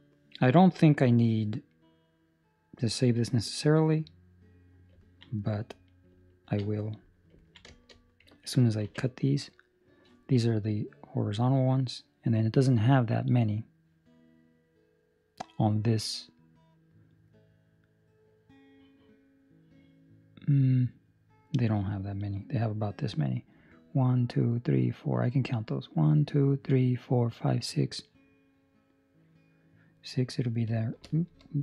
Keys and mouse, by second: 1.0 middle click, 4.9 ctrl+middle click, 5.3 middle click, 6.7 middle click, 7.4 ctrl+middle click, 7.5 ctrl+middle click, 7.8 shift+middle click, 8.2 shift+middle click, 8.8 ctrl+r.